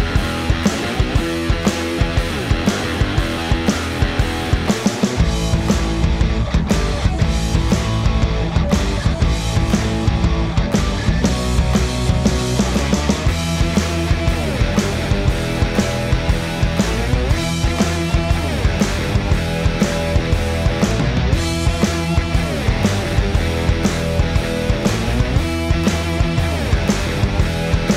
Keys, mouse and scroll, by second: 13.4-14.6 drag, 17.0-19.8 drag, 20.8 right click, 21.8-27.9 drag.